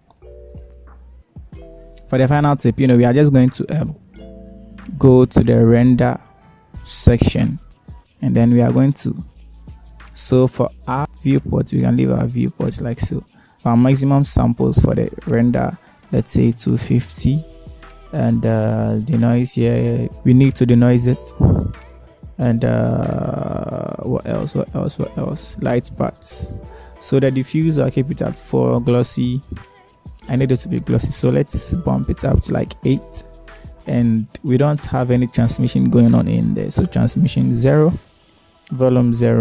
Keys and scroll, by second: 17.7 2, 18.6 Return, 34.1 8, 34.4 Return, 38.6 0, 39.0 Return.